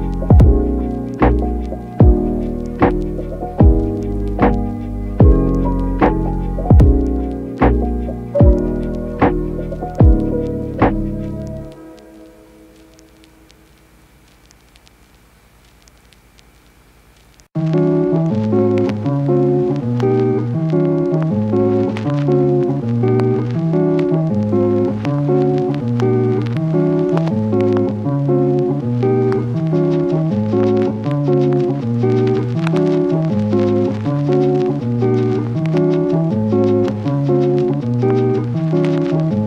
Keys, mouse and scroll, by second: 0.2 alt+shift+click, 1.6 click, 3.2 click, 5.9 click, 6.0 Tab, 6.8 click, 6.9 shift+click, 10.5 click, 10.9 click, 11.1 click, 11.7 click, 12.4 click, 12.6 click, 13.2 alt+shift+click, 14.4 click, 14.7 click, 15.4 click, 16.3 click, 16.8 space, 17.5 alt+shift+click, 18.1 click, 18.3 click, 18.8 shift+click, 19.0 shift+click, 20.4 click, 20.9 click, 21.1 click, 24.0 click, 24.4 shift+click, 25.7 click, 26.2 click, 26.3 click, 26.7 click, 27.7 click, 28.7 click, 29.5 click, 31.3 click, 33.3 shift+click, 33.6 shift+click, 34.1 click, 34.4 click, 34.7 click, 35.0 click, 36.2 click, 38.8 Tab, 38.9 click.